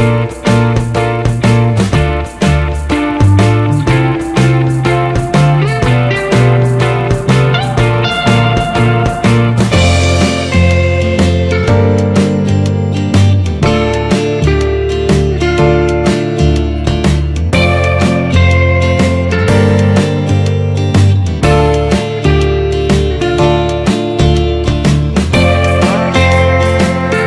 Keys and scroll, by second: 25.9 ctrl+=.